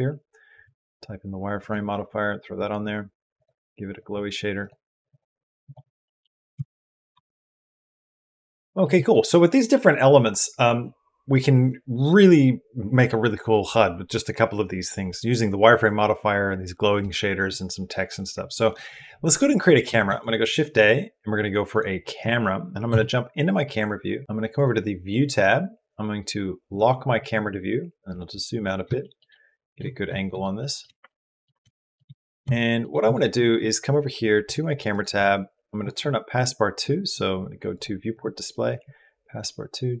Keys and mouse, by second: 3.1 click, 5.0 click, 5.9 click, 6.4 s, 7.0 g, 7.8 click, 8.8 click, 19.9 shift+a, 22.8 KP_0, 24.1 q, 24.3 click, 26.5 click, 28.4 right click, 28.7 shift+right click, 28.8 shift+click, 29.2 click, 29.9 click, 30.4 shift+click, 30.9 ctrl+click, 31.5 shift+middle click, 32.0 middle click, 32.4 shift+middle click, 38.7-40.0 drag.